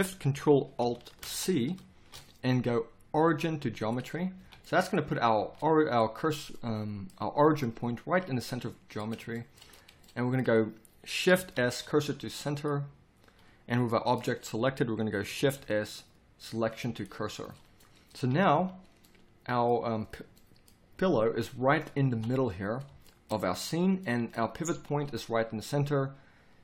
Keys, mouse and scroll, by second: 1.2 ctrl+alt+shift+c, 4.4 z, 5.4 z, 11.6 shift+s, 15.6 shift+s, 18.2 KP_1, 18.5 z, 22.1 KP_7, 24.7 z.